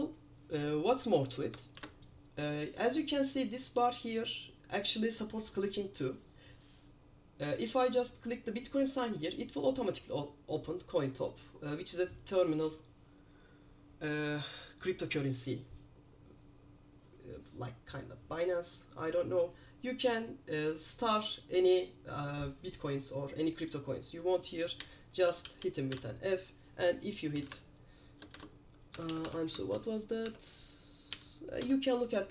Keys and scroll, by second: 1.9 super+4, 25.3-28.2 typing, 29.3 BackSpace, 29.8 shift+f.